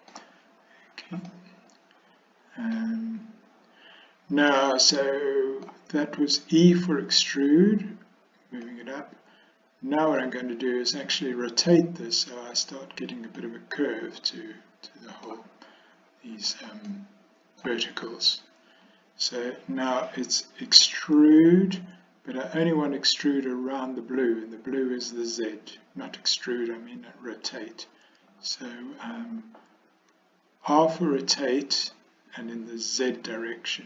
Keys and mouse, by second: 1.4-2.9 middle drag, 4.6-5.7 middle drag, 8.7-10.3 middle drag, 13.5-15.4 middle drag, 16.9 middle click, 30.8 r.